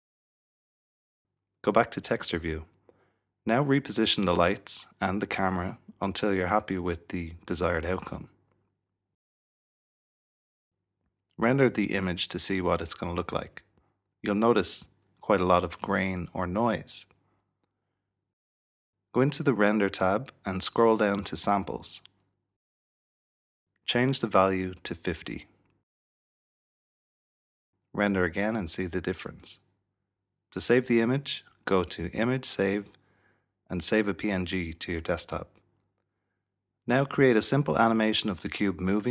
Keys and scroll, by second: 0.1 typing, 4.8-5.5 typing, 6.8-9.7 typing, 19.1-19.9 typing, 22.0 typing, 24.0 typing, 26.2-29.8 typing, 31.1-35.4 typing, 35.3 Return, 35.4 Return, 38.5 i.